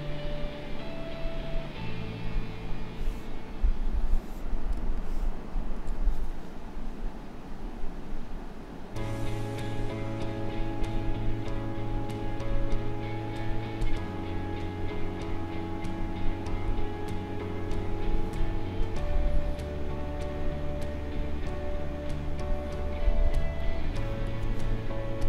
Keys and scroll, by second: 4.7 space, 23.5 space.